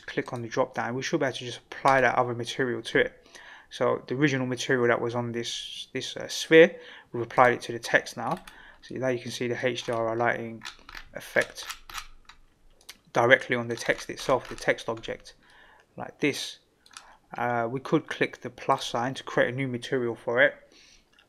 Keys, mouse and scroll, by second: 0.2-2.0 drag, 7.3 click, 8.2 scroll up 3, 8.8-9.5 middle drag, 9.8 scroll up 2, 10.5-12.4 scroll down 7, 12.8 click, 13.4-13.7 middle drag, 13.4 scroll down 1, 13.7-14.5 scroll up 8, 15.5-16.9 middle drag, 18.7 click.